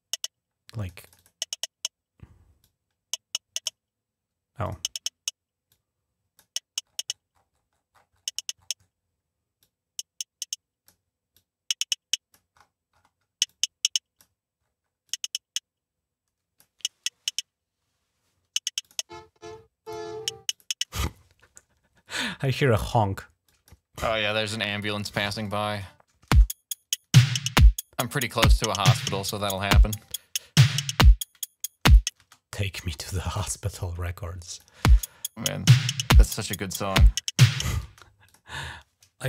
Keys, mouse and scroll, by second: 0.8 click, 0.9 click, 2.4-3.5 drag, 4.4 click, 5.5 click, 6.6-8.9 scroll down 14, 9.4-10.7 drag, 11.1-12.1 drag, 12.3-13.2 scroll up 3, 13.2 click, 14.4-14.7 scroll down 2, 14.9-16.4 drag, 18.6 click, 19.6 click, 20.3 click, 20.7 space, 23.2 click, 25.2 shift+click, 26.1 space, 31.6 click, 32.0 space, 34.3 click, 34.6 space, 36.4 scroll up 1, 37.6 space, 38.0 click.